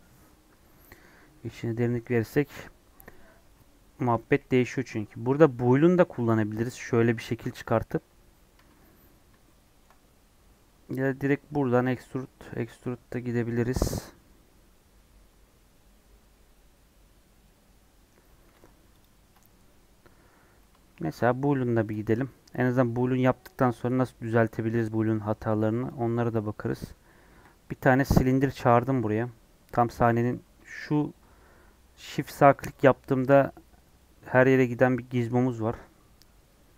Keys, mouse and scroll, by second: 4.2 KP_1, 4.5 KP_3, 8.1 scroll up 1, 9.0 scroll up 2, 9.4-11.2 shift+middle drag, 11.2-11.9 scroll down 4, 12.0 scroll up 3, 18.6 Tab, 18.9 click, 26.2-27.1 scroll down 4, 27.1-29.6 scroll down 1, 29.6-30.7 middle drag, 30.7-36.7 shift+right drag.